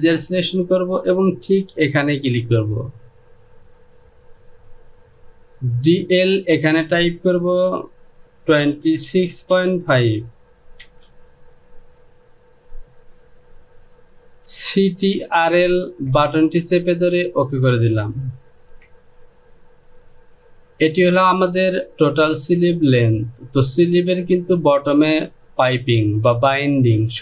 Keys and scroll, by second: 8.5 KP_2, 9.0 KP_6, 9.4 KP_Decimal, 9.9 KP_5, 10.7 Return, 18.6 Home.